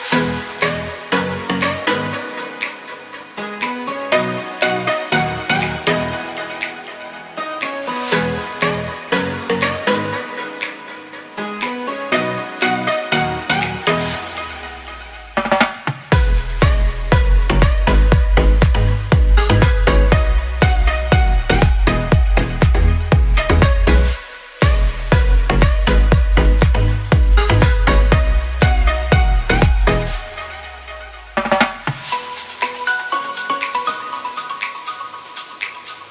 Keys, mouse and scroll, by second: 15.3 shift+a, 16.5-16.8 typing.